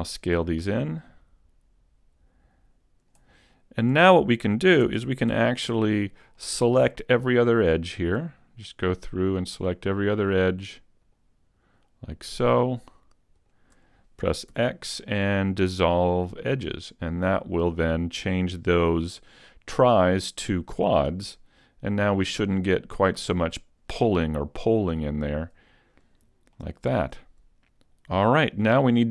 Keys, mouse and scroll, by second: 3.1 click, 3.9 a, 4.9 ctrl+Tab, 6.3 middle click, 7.5 right click, 9.3 shift+right click, 10.2 right click, 11.7 shift+right click, 12.6 shift+right click, 13.4 shift+right click, 14.5 x, 21.3 Tab, 22.3-23.1 scroll down 2, 23.1 middle click, 23.1-23.4 scroll down 2, 25.3 click, 27.3 middle click, 28.1 scroll down 3, 28.7 middle click.